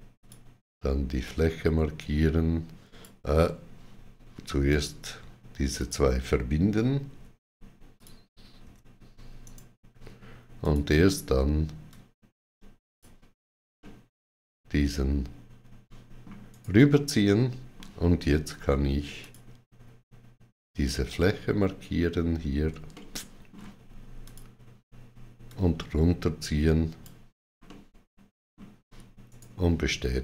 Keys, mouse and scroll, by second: 0.0 click, 1.1 click, 1.1 click, 1.1 right click, 4.5 click, 5.6 click, 6.9 q, 7.8 click, 8.4 q, 9.2 right click, 10.4 click, 11.7 right click, 11.7 click, 13.6 middle click, 16.3 right click, 17.1 middle click, 19.0 click, 22.5 click, 22.5 middle click, 22.5 right click, 22.7 ctrl+middle click, 24.1 click, 25.3 click, 27.5 middle click, 29.1 right click, 30.1 middle click.